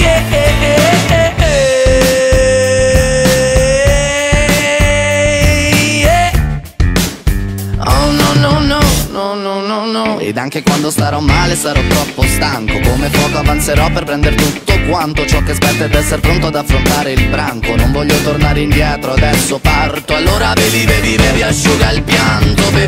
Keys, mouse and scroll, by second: 0.1 alt+right click, 0.9 ctrl+b, 2.7 right click, 3.0-4.4 middle drag, 4.4 right click, 4.6 alt+right click, 5.4 ctrl+b, 6.4 right click, 6.7 middle click, 7.6-9.5 alt+right drag, 9.5 ctrl+b, 11.6 right click, 11.8-13.2 middle drag, 13.2 right click, 13.6 KP_Decimal, 14.0-14.6 scroll down 10, 14.6-15.5 middle drag, 15.5 alt+shift+right click, 16.8 ctrl+b, 19.2 middle click, 19.5-19.9 scroll down 9, 19.9 shift+middle click, 20.1-22.0 alt+right drag, 22.0 s, 22.4 ctrl+right click.